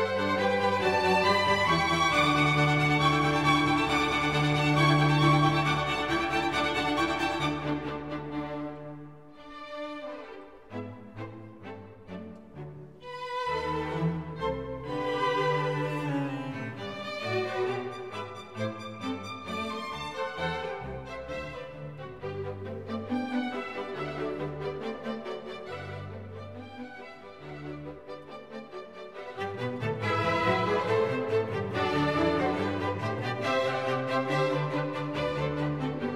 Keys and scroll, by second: 7.8 o, 23.0 o, 27.2 Right, 27.3 Right, 27.3 Right, 27.4 Right, 27.5 Right, 27.6 Right, 28.0 Left.